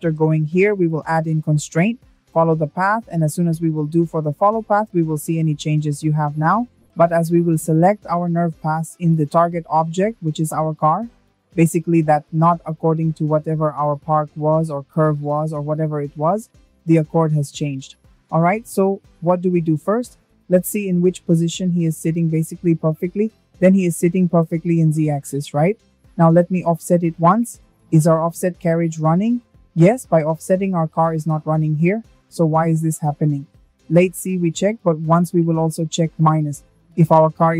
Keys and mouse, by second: 4.5 click, 16.7 click, 18.0 click, 19.7 click, 23.7-26.3 drag, 33.2 click, 34.7-37.2 drag.